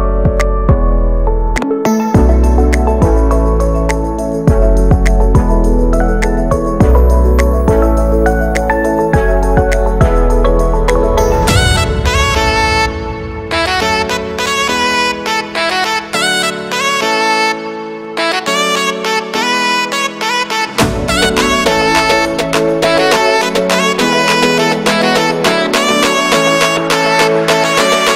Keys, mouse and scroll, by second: 0.0 ctrl+space, 0.0 middle click, 2.2 ctrl+space, 2.5 click, 3.3 shift+middle click, 3.8-4.3 scroll down 2, 4.3-5.6 drag, 5.6 shift+middle click, 6.0 x, 6.2 scroll down 1, 6.4 click, 7.2 shift+middle click, 7.5 scroll up 1, 7.6 x, 7.8-10.1 drag, 10.1-11.4 middle drag, 11.4-14.4 drag, 14.4 shift+middle click, 14.7 scroll up 1, 14.9 x, 15.1-15.9 scroll down 1, 15.9 scroll down 1, 15.9 click, 16.8 middle click, 17.2-17.5 scroll down 1, 17.5 click, 17.7 shift+middle click, 18.2-19.9 drag, 19.9 x, 20.0 click, 20.7 middle click, 21.0-22.8 drag, 22.8 middle click, 23.0-23.6 scroll up 2, 23.2 middle click, 23.6 click, 24.6 middle click, 24.9 x, 25.0-26.1 drag, 26.1 shift+middle click, 26.7 scroll up 1, 26.9-28.1 drag.